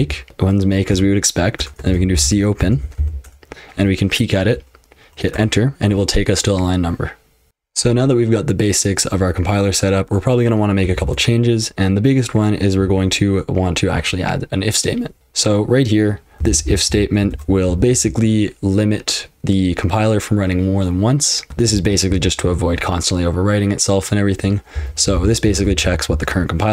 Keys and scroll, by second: 0.0-0.5 typing, 0.9 Return, 1.6-3.5 typing, 5.3 Return, 7.5 super+h, 7.5 super+l, 10.9 shift+o, 15.2 alt+v, 16.1-18.4 typing, 21.7 ctrl+[, 22.1 j, 22.4 j, 24.5-26.7 typing.